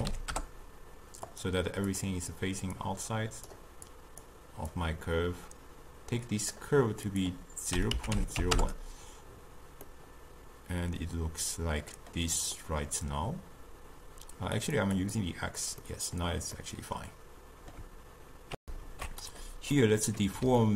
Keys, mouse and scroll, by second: 9.9-15.1 middle drag, 15.1 click, 15.9-18.6 middle drag, 18.6 ctrl+alt+shift+q, 19.8-20.7 middle drag.